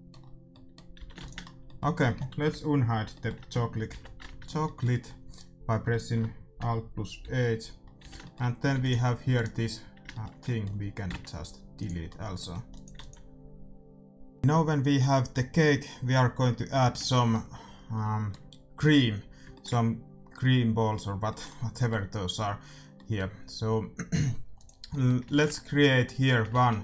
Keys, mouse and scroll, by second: 0.9 a, 1.1 ctrl+s, 3.8 alt+g, 5.3-7.1 right drag, 7.4 alt+h, 8.0 a, 8.7 ctrl+s, 9.4-11.1 right drag, 11.0 x, 12.7-14.4 drag, 12.9 ctrl+s, 16.6-21.4 middle drag, 24.5-26.3 drag, 26.5 shift+a.